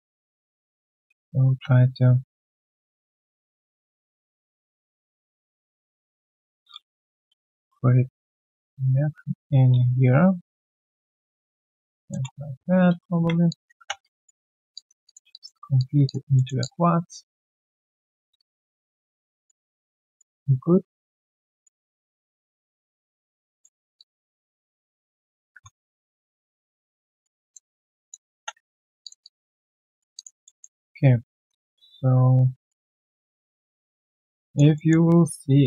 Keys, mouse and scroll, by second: 2.1 ctrl+z, 12.2 Return, 13.1 q, 13.4 alt+click, 13.7 3, 14.0 right click, 14.4-14.7 scroll down 1, 14.7 alt+click, 15.0 alt+click, 15.6 alt+right click, 15.7 alt+click, 16.3 alt+middle click, 16.6 alt+click, 17.7 alt+click, 18.0 alt+middle click, 18.3 alt+click, 19.0 alt+middle click, 19.2 alt+click, 19.7 alt+middle click, 20.0 alt+click, 20.9 alt+middle click, 21.3 alt+click, 21.9 alt+middle click, 22.2 alt+click, 23.6 alt+middle click, 23.9 alt+click, 25.5 1, 25.7-26.1 scroll, 26.5 right click, 27.4 alt+click, 27.7 alt+middle click, 28.3 3, 28.7 alt+middle click, 29.0 alt+click, 29.7 alt+right click, 29.8 alt+click, 30.4 alt+middle click, 30.7 alt+click, 31.6 alt+middle click, 32.5 alt+click, 32.8 alt+right click, 33.1 alt+middle click, 33.4 alt+right click, 33.6 alt+click, 34.0 alt+middle click, 34.4 alt+click, 34.7 alt+middle click, 34.9-35.4 alt+scroll down 1, 35.4 alt+click.